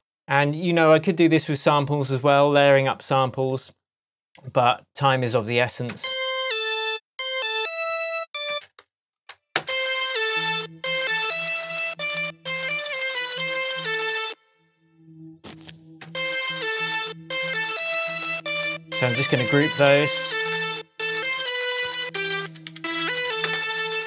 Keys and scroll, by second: 5.9 space, 8.5 space, 10.4 space, 14.2 space, 16.0 space, 19.2 shift+super+g, 19.7 super+g, 20.5 super+r, 21.9-24.0 typing.